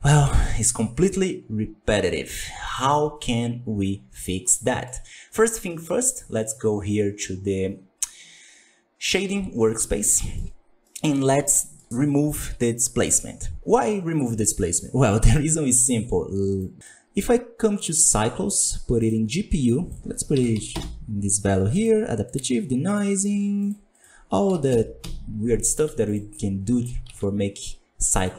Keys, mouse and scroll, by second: 0.7-1.2 scroll down 16, 1.8 scroll down 5, 2.6 click, 4.0-4.6 scroll down 8, 4.6 middle drag, 4.8 scroll up 3, 9.0 click, 17.8-21.8 drag, 22.8 click, 23.6-26.2 drag, 26.2 z, 27.1 alt+a, 28.1-28.3 drag.